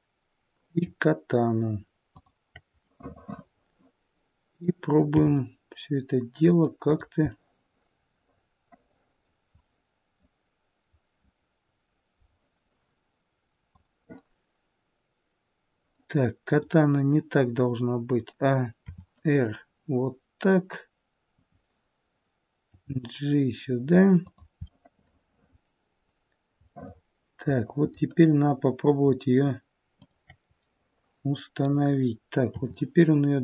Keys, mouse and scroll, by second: 2.0 shift+click, 2.7 middle click, 5.1 r, 7.3 middle click, 9.7 middle click, 16.5 click, 18.8 r, 22.7 g, 24.7 middle click, 26.7 middle click, 30.0 middle click, 30.0 shift+click, 30.6 middle click, 32.5 r.